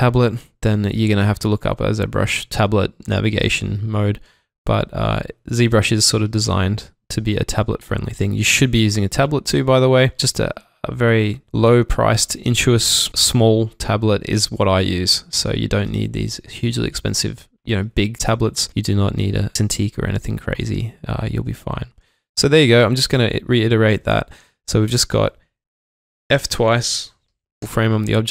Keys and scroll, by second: 22.4 alt+Num_Lock, 27.3 typing.